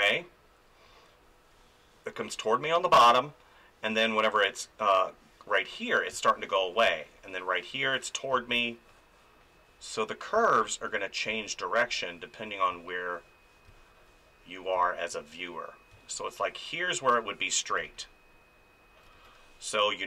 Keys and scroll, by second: 2.6 ctrl+z, 6.1 space, 10.3 space, 17.8 space, 19.2 ctrl+z.